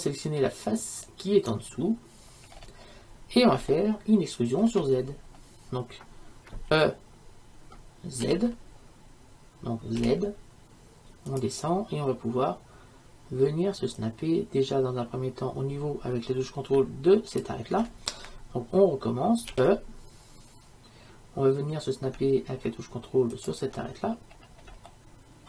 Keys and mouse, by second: 1.2-2.4 right drag, 2.4-4.0 middle drag, 4.1 middle click, 6.8 e, 19.6 e, 24.4-25.4 middle drag.